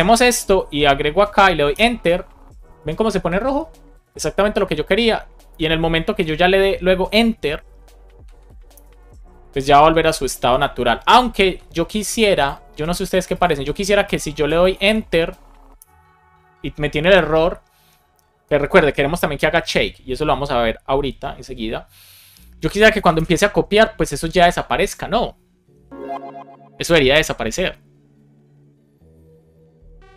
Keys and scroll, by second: 1.5 Return, 8.7 Return, 15.7 Return.